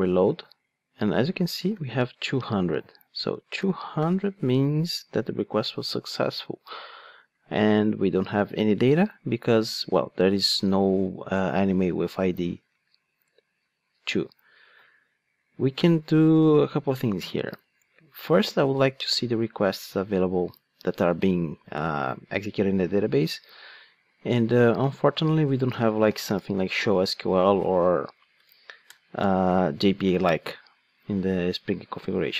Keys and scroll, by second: 24.8 Tab.